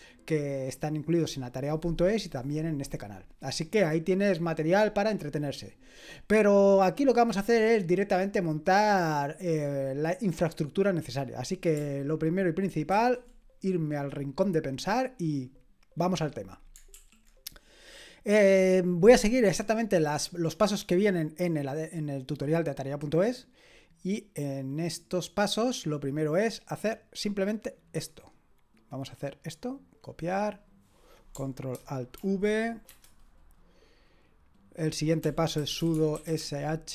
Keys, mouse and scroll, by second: 12.9 ctrl+1, 16.9 super+l, 27.7-32.1 drag, 29.3 middle click, 29.3 right click, 32.1 ctrl+alt+v, 32.9 Return, 35.0-36.9 typing.